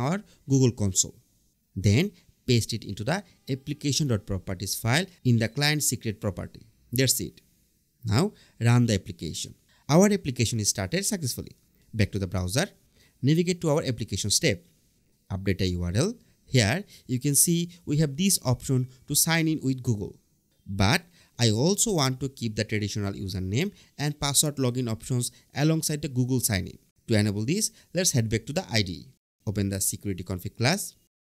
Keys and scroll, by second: 1.4 super+Tab, 3.2 super+v, 14.7 BackSpace, 15.0 Return.